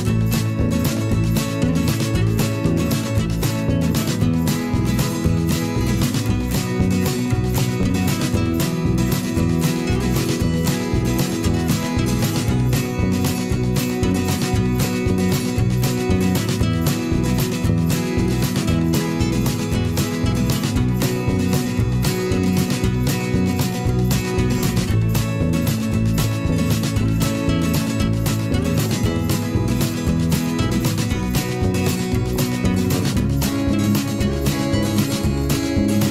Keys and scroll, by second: 25.0 m, 28.8 ctrl+shift+[.